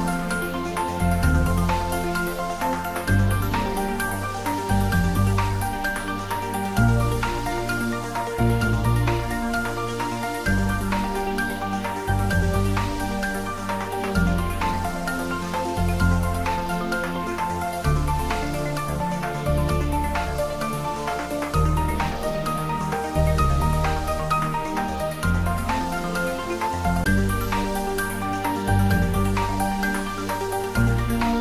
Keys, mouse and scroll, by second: 4.0-4.6 typing, 5.8-6.6 typing, 6.8 Return, 9.9 click, 11.8-13.0 typing, 14.1 Return, 18.4-18.9 scroll down 1, 18.9-20.5 middle drag, 20.5 click, 20.7-22.5 right drag, 22.5-26.0 drag, 26.8-31.4 drag.